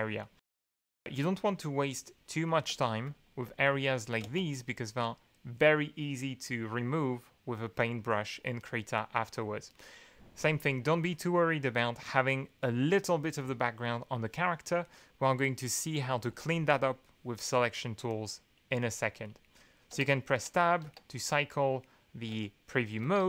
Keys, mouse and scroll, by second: 2.7 BackSpace, 4.2 space, 8.6-9.5 middle drag, 9.6 middle click, 17.4-18.2 middle drag, 19.9 Tab, 20.8 Tab, 22.3 Tab, 23.0 Tab.